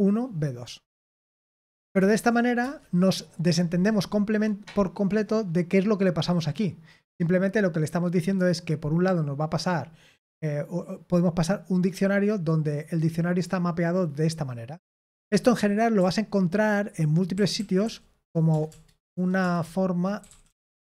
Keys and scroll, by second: 1.7 ctrl+p, 2.6 Return, 16.5-20.8 typing, 19.0 Return.